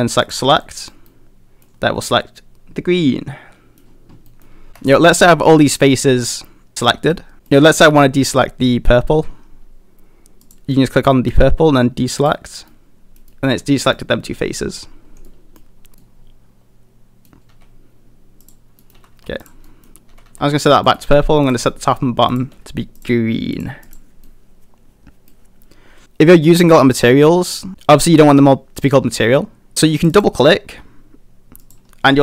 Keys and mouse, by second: 0.6 middle click, 1.1 middle click, 2.0-3.8 middle drag, 4.3 middle click, 4.7 a, 4.8 a, 5.2 a, 6.1-7.1 middle drag, 7.3 middle click, 7.9 middle click, 10.4 click, 12.3 click, 12.7 middle click, 13.3 middle click, 13.8 middle click, 15.2 middle click, 15.9 a, 16.0-17.3 middle drag, 17.5 a, 18.4 click, 18.8 middle click, 18.9 a, 19.1 a, 19.4 click, 19.7 middle click, 20.1 a, 20.3 a, 20.4 middle click, 21.0 middle click, 21.4 click, 21.7 middle click, 23.0 click, 23.6 click, 23.9 click, 24.2-25.3 middle drag, 27.0 middle click, 30.0-32.2 drag.